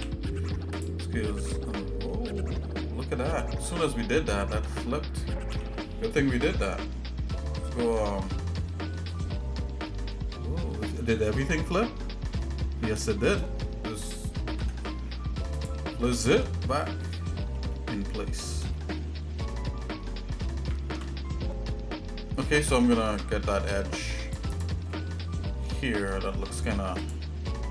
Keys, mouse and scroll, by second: 2.1 middle click, 2.5 scroll down 1, 2.5 scroll up 1, 2.6-3.2 scroll down 2, 4.0 scroll up 1, 4.5 Tab, 5.5 a, 8.3-8.7 scroll down 3, 8.7 scroll up 1, 8.7-9.2 scroll down 2, 9.1 scroll up 1, 9.2 scroll down 1, 9.3-9.9 scroll up 3, 9.9 middle click, 10.8-11.2 scroll up 2, 12.4 shift+middle click, 14.5 alt+n, 16.1 scroll down 2, 16.2 scroll up 1, 16.2 scroll down 1, 16.7 shift+middle click, 17.7 shift+middle click, 18.7 middle click, 19.5 middle click, 20.1-20.8 scroll up 2, 20.8 ctrl+Tab, 23.3 ctrl+Tab, 24.9 middle click, 26.1 shift+middle click, 27.0 click.